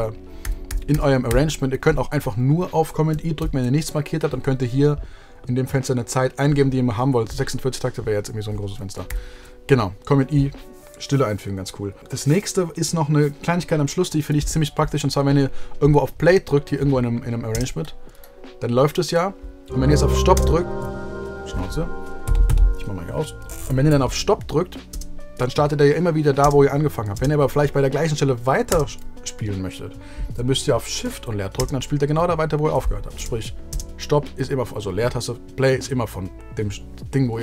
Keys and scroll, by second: 0.4 super+z, 1.2 super+z, 9.0 super+z, 17.5 space, 20.3 space, 24.8 space, 31.5 shift+space, 33.1 space.